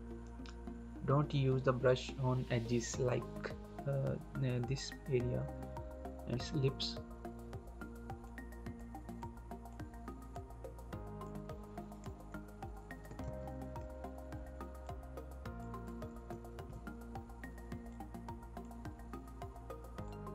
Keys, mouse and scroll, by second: 8.1 click, 13.0 ctrl+click, 13.1 ctrl+z, 14.7 click, 17.8 click, 18.8-20.0 scroll down 1, 20.0 click.